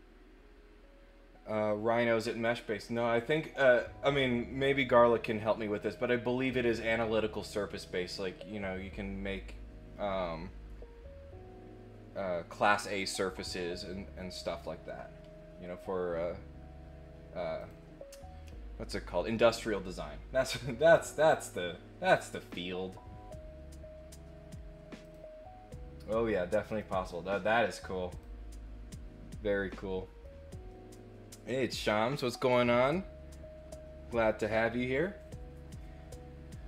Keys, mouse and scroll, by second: 17.5 click, 21.4 click, 22.3 click, 25.0 click, 26.6 click, 27.4 click, 28.1 click, 29.6 middle click, 30.6 middle click.